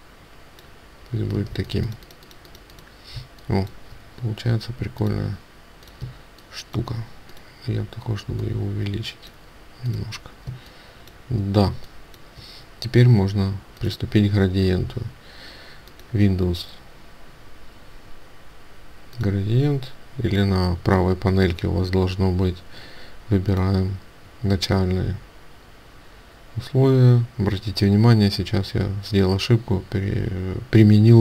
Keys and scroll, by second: 1.4 ctrl+space.